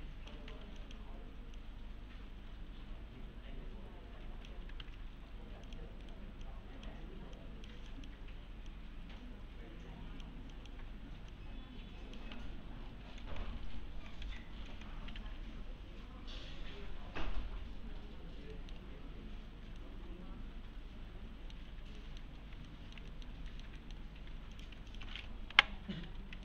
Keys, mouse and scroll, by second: 0.5 1, 0.8 click, 4.8 alt+1, 5.7 click, 6.0 right click, 6.5-7.1 click, 7.7-8.2 click, 9.0-10.2 click, 11.6-12.2 click, 12.3 1, 12.5-12.9 scroll down 1, 13.2 alt+x, 15.2 F3, 18.2 scroll down 1, 18.5 middle click, 18.9-19.5 scroll up 1, 19.8-21.0 alt+middle click, 22.0 alt+middle click, 22.7 alt+middle click, 23.5 alt+middle click, 24.1 scroll up 1, 24.3 4, 24.5 click, 24.9 ctrl+click.